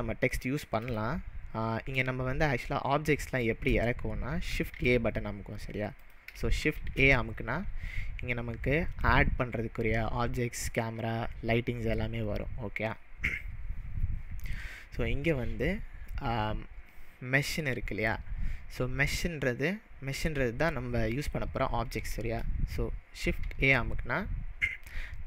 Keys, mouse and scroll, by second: 1.0 click, 2.7-4.8 shift+middle drag, 4.8 shift+a, 6.1 click, 6.6 shift+a, 23.4 shift+a.